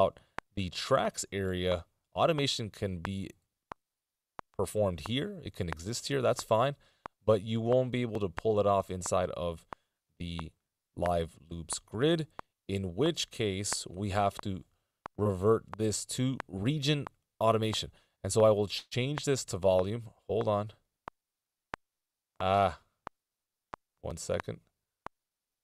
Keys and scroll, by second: 8.2 super+z.